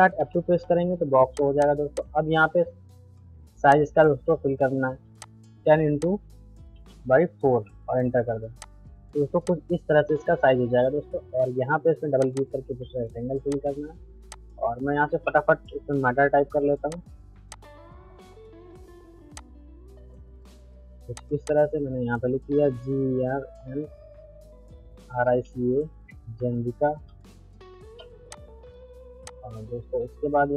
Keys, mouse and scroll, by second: 1.4 click, 4.2 ctrl+z, 5.2 click, 7.1 Tab, 8.6 click, 12.2 click, 14.5-15.4 typing, 15.6 shift+F2, 16.9 click, 19.3-21.1 shift+drag, 22.6 shift+g, 24.6-25.7 typing, 25.8 ctrl+a, 26.4 shift+F3, 26.7 u, 28.3-30.5 drag.